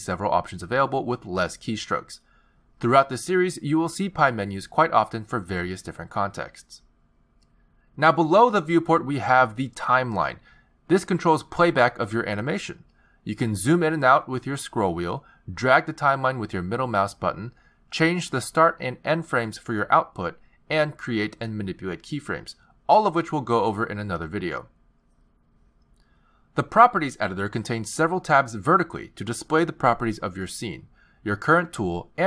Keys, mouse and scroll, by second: 4.0 z, 5.5 shift+s, 10.6 click, 11.7 click, 13.6 click, 14.8-15.4 scroll down 6, 15.4-16.0 scroll up 5, 16.0-16.4 scroll down 2, 16.4-17.5 scroll up 3, 17.5 middle click, 20.0 click, 22.1 click, 24.1 i, 26.0 click, 29.9 click.